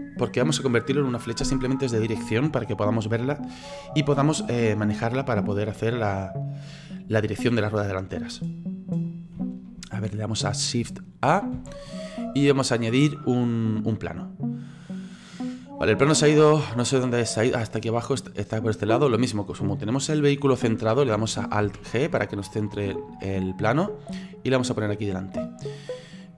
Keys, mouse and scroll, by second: 11.6 shift+a, 15.8-16.7 scroll down 9, 16.7-17.9 scroll up 9, 17.9-21.0 middle drag, 21.7 alt+g, 22.5-24.5 middle drag, 24.5-26.2 drag, 26.2-26.3 middle drag.